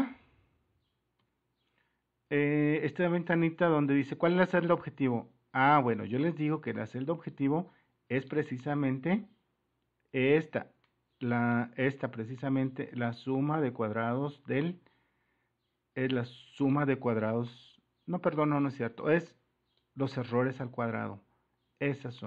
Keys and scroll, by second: 4.2 super+-, 8.5 super+-.